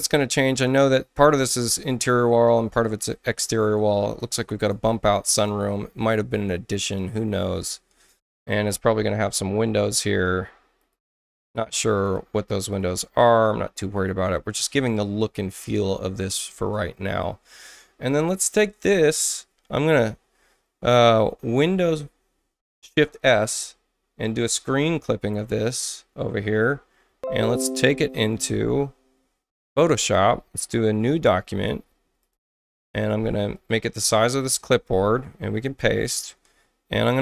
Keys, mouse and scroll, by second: 1.0 space, 4.1 click, 5.3 click, 6.9-8.1 drag, 10.1 click, 10.8 click, 11.4 click, 12.0 click, 12.7 click, 13.3 click, 13.9 click, 14.6 space, 23.0 shift+super+s, 24.4-26.6 drag, 29.8 click, 31.1 ctrl+n, 32.2 click, 32.6 click, 33.5 click, 35.7 ctrl+v, 36.4 middle click, 36.4 scroll down 2, 37.0 alt+middle click, 37.0 alt+scroll down 2.